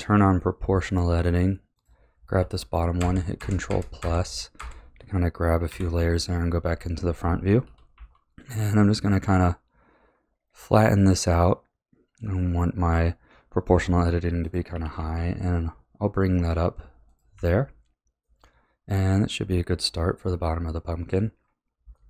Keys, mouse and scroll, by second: 0.3-1.7 middle drag, 1.7 click, 2.9 ctrl+KP_Add, 3.3 ctrl+KP_Add, 3.6 ctrl+KP_Add, 4.0 ctrl+KP_Add, 4.5 ctrl+KP_Add, 5.7 KP_1, 7.6 s, 14.7 g, 17.3 a, 18.2-21.1 middle drag, 21.9-22.0 middle drag.